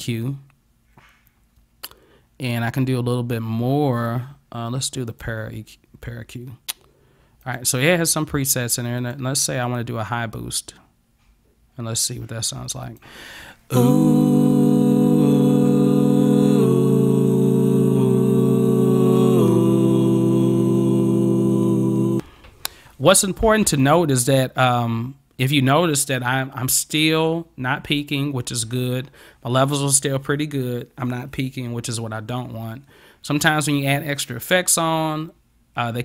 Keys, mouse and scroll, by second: 5.2 click, 7.5 click, 9.0 click, 12.9 click, 23.9 click.